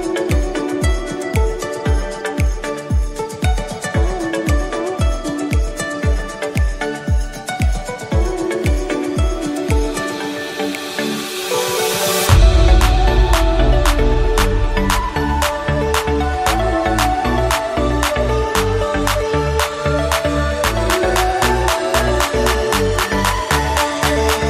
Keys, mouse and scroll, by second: 0.6 click, 3.5 click, 6.2-6.8 middle drag, 6.8 click, 7.3-8.0 middle drag, 8.0 scroll down 2, 8.3-10.6 middle drag, 10.6 click, 11.2 middle click, 12.0 s, 13.7 KP_1, 15.5 g, 18.3 click, 18.6-21.5 middle drag, 21.5 click, 22.5 s, 23.9 click, 24.0-24.4 middle drag.